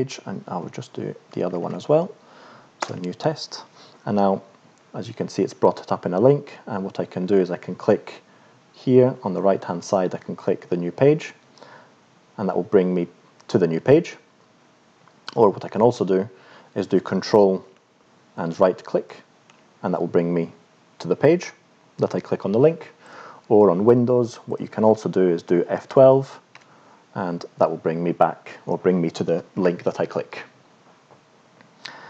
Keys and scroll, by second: 0.5 n, 1.5 Down, 2.9 Return, 26.6 F12.